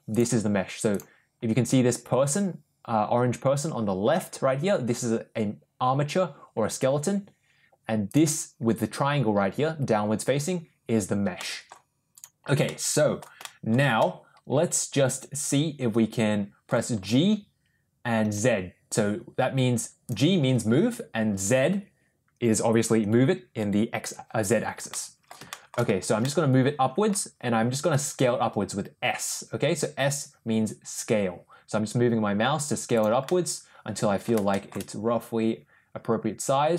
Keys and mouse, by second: 0.0 click, 8.0 click, 11.3-11.6 middle drag, 12.5-13.1 middle drag, 13.3 shift+middle click, 13.9-16.5 middle drag, 16.9 g, 24.8-25.2 middle drag, 25.4 shift+middle click, 26.1-27.0 middle drag, 27.9 s, 33.1-34.2 middle drag, 34.4 shift+middle click.